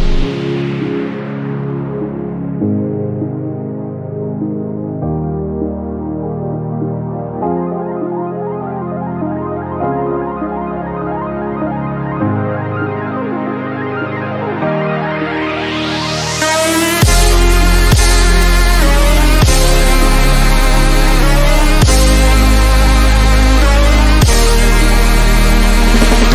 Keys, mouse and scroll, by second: 1.8-2.5 typing, 3.6-5.3 typing, 3.9 click, 8.8 click, 10.9-12.9 typing, 11.5 click, 12.8 click, 15.3 shift+m, 17.5-18.3 drag, 22.5 click, 23.3 right click, 24.1 click, 25.3 shift+click.